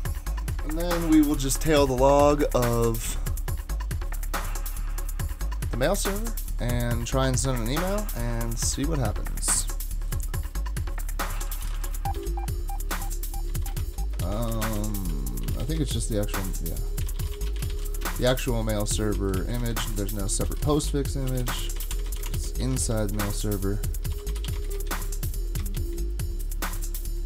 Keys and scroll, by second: 11.1-25.6 typing.